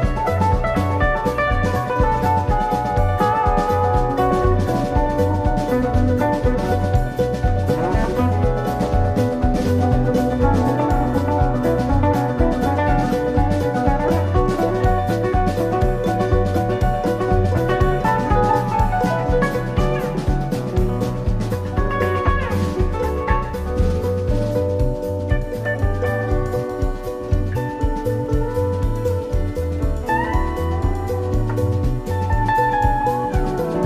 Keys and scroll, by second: 15.0 BackSpace, 17.4 BackSpace, 21.9 super+[, 29.7 super+].